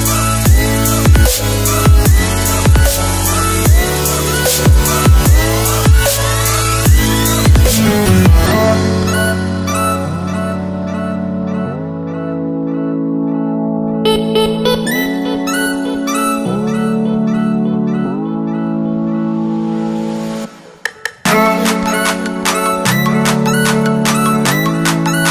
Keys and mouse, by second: 2.3-3.4 drag, 5.2 click, 7.6-8.5 middle drag, 10.0 right click, 11.3-13.4 middle drag, 15.2 click, 18.3-19.9 middle drag.